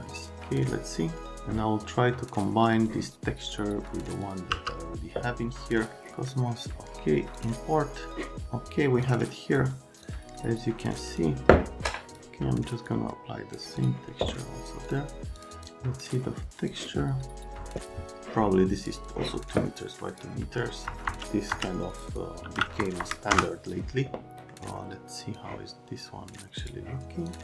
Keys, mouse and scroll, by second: 0.1 click, 2.6 click, 4.5 m, 5.7 right click, 7.4 click, 9.0 click, 10.0 click, 11.1 click, 11.9 right click, 12.1 click, 12.8 click, 13.8 click, 14.9 click, 15.4 click, 15.5 click, 16.1 click, 18.8 click, 18.9 click, 20.1 click, 20.8 click, 21.0-23.0 typing, 21.9 click, 23.3 KP_Enter, 24.3 scroll down 1, 25.2 click, 26.6 click, 27.3 click.